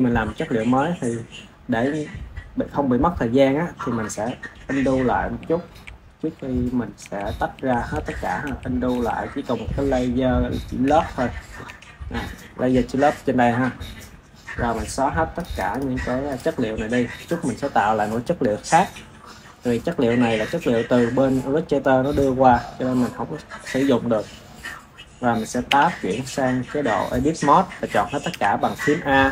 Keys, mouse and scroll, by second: 5.1 ctrl+z, 5.6 ctrl+z, 6.1 ctrl+z, 6.9 ctrl+z, 7.4 ctrl+z, 7.8 ctrl+z, 8.4 ctrl+z, 8.9 ctrl+z, 10.7 Tab, 11.6 Tab, 15.2-19.2 drag, 25.6 Tab, 28.2 a.